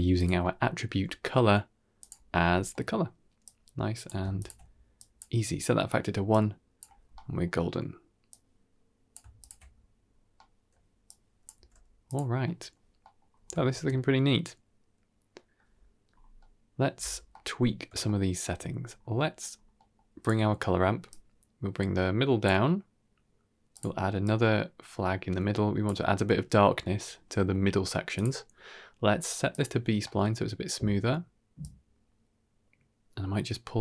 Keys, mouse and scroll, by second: 0.0 click, 0.3 middle click, 0.7 g, 2.2-2.6 scroll up 4, 2.6 middle click, 3.3-3.9 drag, 4.3 ctrl+shift+click, 4.8 drag, 6.2-6.7 drag, 6.9-7.3 scroll down 2, 7.0 middle click, 8.2-9.0 drag, 9.3 ctrl+shift+drag, 10.0 scroll down 2, 10.2 middle click, 10.9 click, 11.4 g, 12.3 middle click, 12.9 middle click, 13.2-13.5 scroll up 3, 13.5 shift+middle drag, 13.8-15.4 middle drag, 15.9-16.4 scroll up 2, 16.3-16.7 middle drag, 16.9-17.2 scroll up 1, 17.2 middle drag, 17.9-18.3 shift+middle drag, 18.6-19.6 scroll up 4, 19.0 middle drag, 19.6 middle click, 20.1 click, 21.0-22.3 drag, 23.6 click, 24.1-25.7 drag, 28.0-29.5 drag, 29.9 middle click, 31.5-33.8 drag.